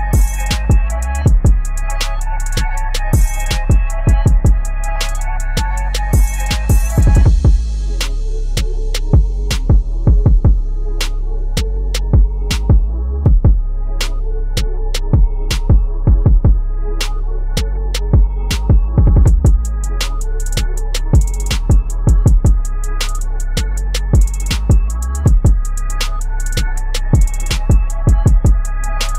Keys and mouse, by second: 0.3 ctrl+g, 0.8 click, 1.8-3.1 typing, 4.0 click, 5.1 ctrl+g, 5.6 click, 5.9-6.9 typing, 7.4-12.2 drag, 13.8 t, 14.2 click, 15.2-16.6 typing, 17.8-24.6 drag, 26.0 Tab, 27.5 click.